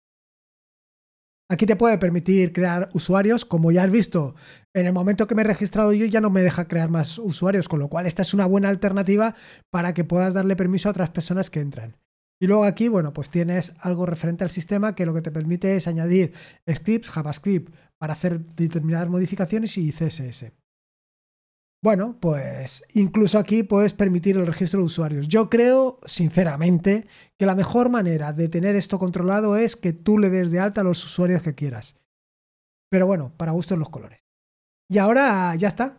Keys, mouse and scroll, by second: 12.1-17.4 drag.